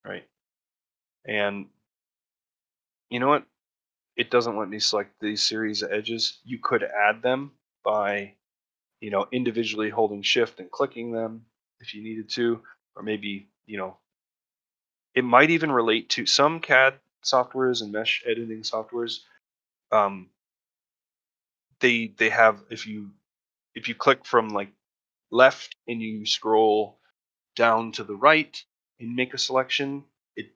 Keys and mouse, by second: 2.8-4.1 drag, 4.6 middle click, 5.9 middle click, 6.3 shift+middle click, 6.7 ctrl+middle click, 7.3 shift+middle click, 8.0 shift+middle click, 9.9 shift+click, 11.4 shift+click, 12.5 shift+click, 13.5 shift+click, 14.8 ctrl+middle click, 15.1 shift+middle click, 16.3 shift+middle click.